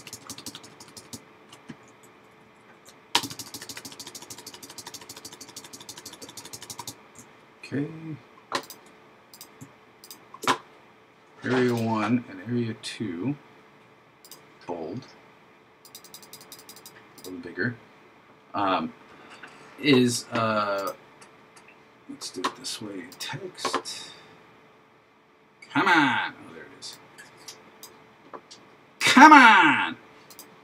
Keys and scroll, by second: 2.2 super+Left.